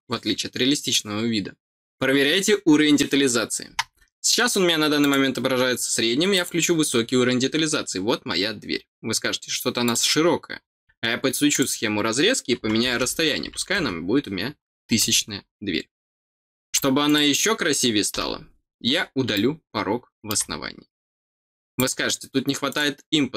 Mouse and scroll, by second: 4.9 click, 6.3 click, 9.8 click, 10.5 scroll down 1, 11.5 click, 15.4 scroll up 1, 17.0 click, 19.3 middle click, 21.7 click, 22.6 click.